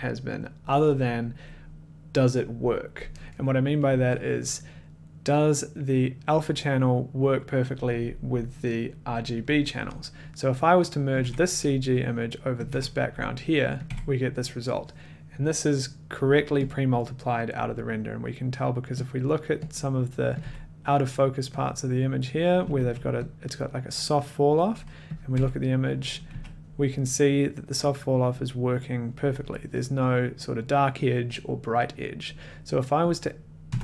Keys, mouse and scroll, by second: 11.2 click, 11.2 1, 12.6 click, 12.7 1, 13.8 click, 13.9 1, 16.9 click, 18.0 middle click, 18.7 middle click, 19.2 click, 19.2 middle click, 19.7 click, 20.2 middle click, 20.4 click, 20.4 1, 21.3 middle click, 21.7 middle click, 21.7 click, 22.7 a, 23.4 middle click, 23.6 click, 25.3 click, 25.3-26.8 typing, 25.6 scroll, 29.2 middle click, 33.1 click, 33.7 Tab.